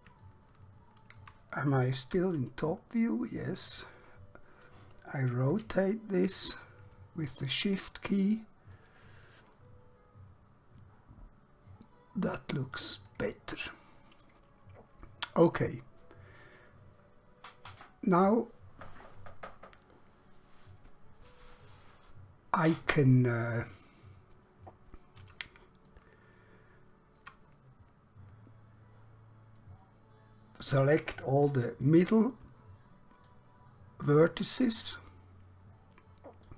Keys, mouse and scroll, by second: 0.3 shift+middle click, 2.1 KP_7, 5.7 r, 13.2 click, 14.3 click, 23.9 middle click, 25.9 shift+middle click, 29.7 middle click, 32.1 1, 33.3 click.